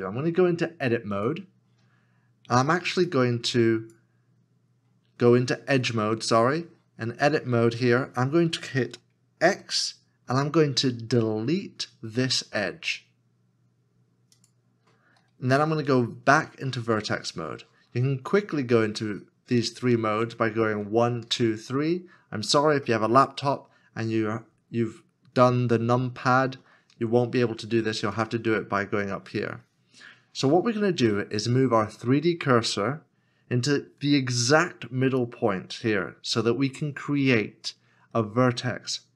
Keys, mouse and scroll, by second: 9.4 x, 20.8 1, 21.6 3, 21.6 2, 26.9 1.